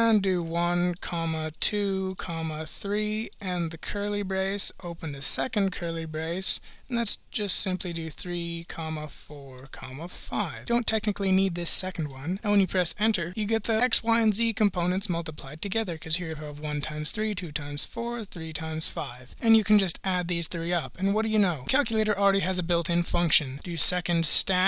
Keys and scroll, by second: 0.4-2.7 typing, 3.9 ), 5.4 (, 7.9-10.2 typing, 12.4 Return.